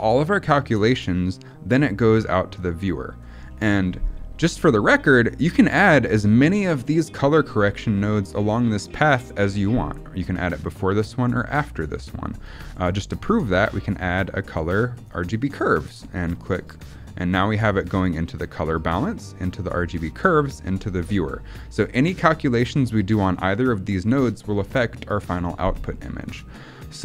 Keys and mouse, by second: 3.4 middle click, 5.0 middle click, 5.7 middle click, 11.9 middle click, 13.0-16.5 drag, 26.5 middle click.